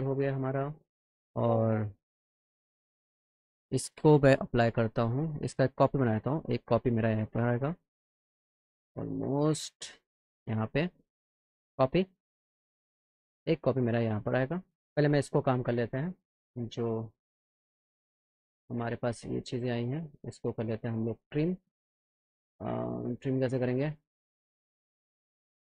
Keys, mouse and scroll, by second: 0.5 click, 2.2 click, 4.1 click, 5.5 shift+click, 9.3 shift+click, 11.6 click, 12.3 click, 13.4-14.8 shift+drag, 15.2 click, 16.3 click, 18.4 click, 25.2 click.